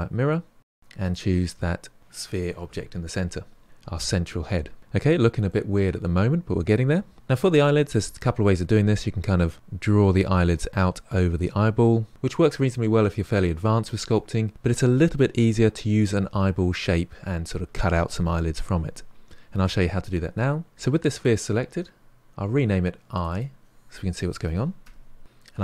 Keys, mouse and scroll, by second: 0.7 click, 1.0 click, 4.8 middle click, 4.9-5.4 scroll down 1, 5.4-7.1 middle drag, 21.8-23.1 scroll down 3, 23.1-25.2 drag.